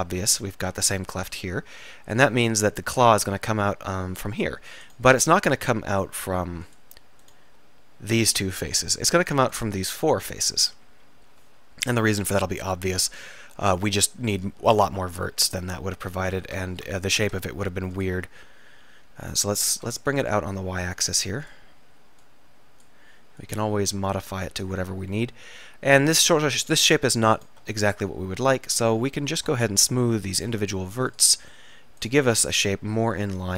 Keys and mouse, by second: 2.0-4.6 middle drag, 5.0-7.7 drag, 7.7-9.4 middle drag, 10.4 middle click, 11.0 KP_3, 15.4 e, 16.7 ctrl+z, 18.6 ctrl+z, 18.7 e, 24.3 middle click, 24.6 click, 24.9 middle click, 25.3 click, 25.5 middle click, 26.0 click, 27.0 middle click, 27.4 click, 27.9-30.4 middle drag, 32.5 middle click, 33.2-33.5 right drag.